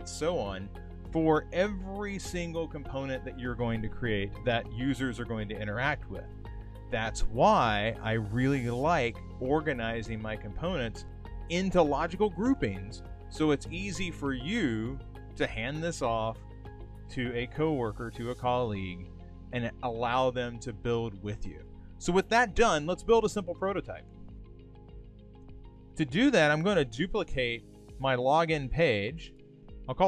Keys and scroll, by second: 25.2 super+c, 29.5 shift+e.